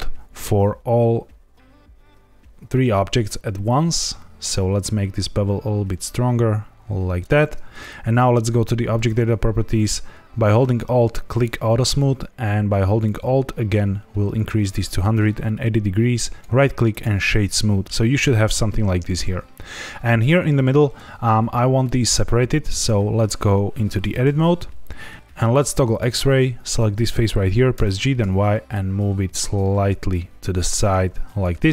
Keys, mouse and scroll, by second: 8.9 click, 11.2 alt+click, 13.0 alt+click, 16.1 right click, 17.8 shift+middle click, 22.7 click, 24.0 Tab, 25.1 click, 26.6 click, 27.7 g, 27.9 y, 30.7 shift+click, 31.4 Tab.